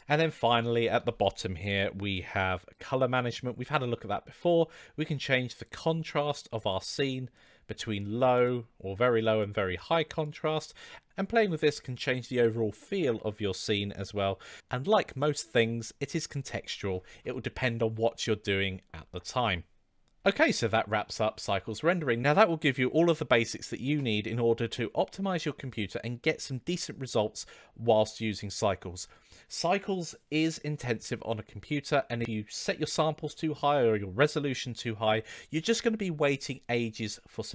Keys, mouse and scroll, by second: 0.0 click, 4.7-5.8 drag, 6.6-7.4 drag, 8.4-9.4 drag, 10.1-11.1 drag.